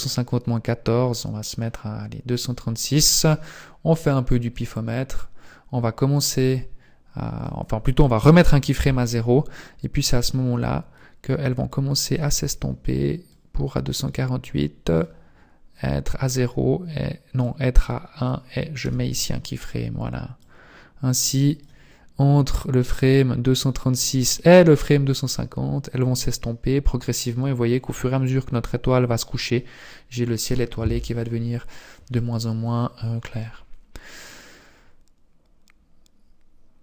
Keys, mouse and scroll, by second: 4.1 click, 8.8 i, 10.3 click, 11.7 click, 13.2 click, 14.5 click, 17.5 click, 18.9 i, 20.5 click, 22.9 click, 32.3 click.